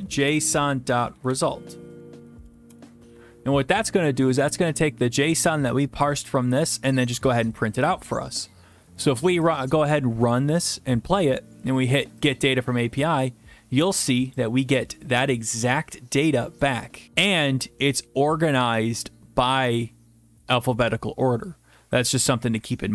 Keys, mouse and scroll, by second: 0.0-1.3 typing, 2.3 Down, 2.4 Down, 2.7 Return, 5.4 click, 7.5 click, 7.9 click, 9.5 click, 12.3 click, 13.3 drag, 15.1-16.3 drag, 16.6-17.0 drag.